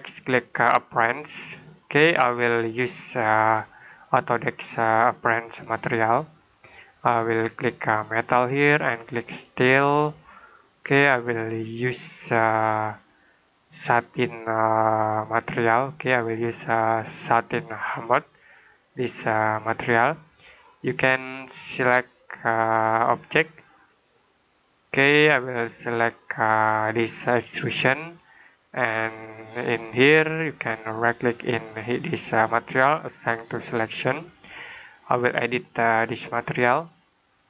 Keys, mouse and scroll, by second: 11.6 click, 13.1 click, 21.5 click, 27.5 click, 31.6 right click, 33.4 click.